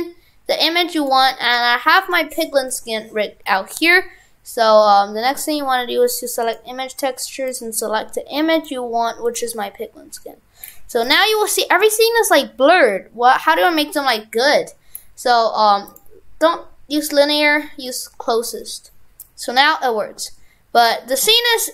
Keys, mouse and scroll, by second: 2.7-3.2 scroll up 7, 3.4-5.3 scroll down 2, 5.3 click, 10.1-10.7 scroll up 3, 10.7 scroll down 2, 11.3 shift+middle click, 12.0 middle click, 14.9 scroll down 1, 15.9 click.